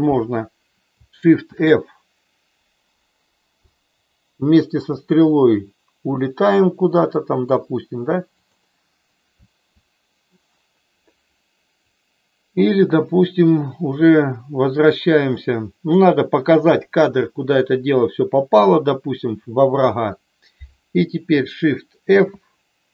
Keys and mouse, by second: 1.4 shift+f, 3.5-5.2 Up, 8.4 click, 9.5 Right, 12.0-15.9 drag, 22.2 shift+f.